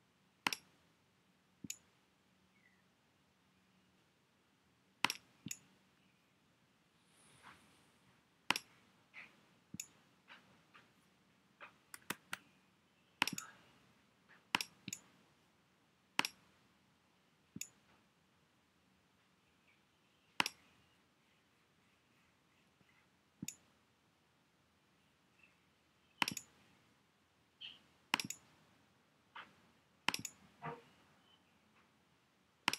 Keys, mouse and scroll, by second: 4.0 alt+super+z, 12.2 super+z.